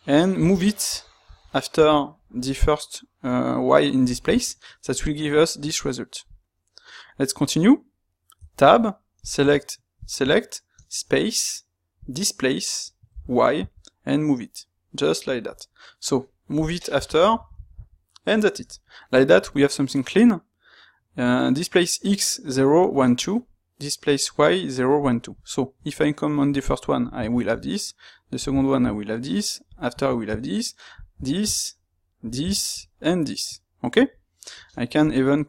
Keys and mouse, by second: 9.1 click, 9.9 shift+click.